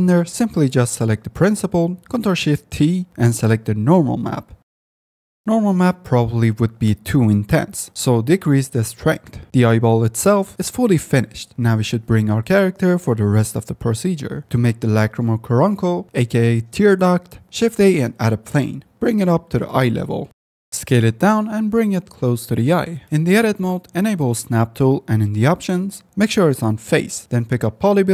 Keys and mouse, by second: 0.8 click, 6.9-8.3 drag, 9.5-9.9 drag, 10.7-11.0 drag, 11.5 F9, 13.1 shift+drag, 14.4 shift+a, 17.4 shift+a, 19.3 g, 19.5 z, 20.6 KP_Enter, 20.6-22.6 typing, 22.2 click, 22.4 KP_Enter, 24.4 click, 25.7-27.7 drag.